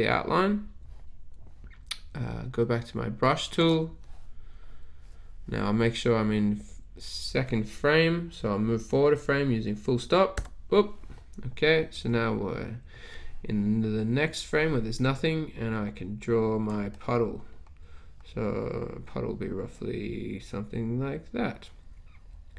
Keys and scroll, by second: 10.5 ..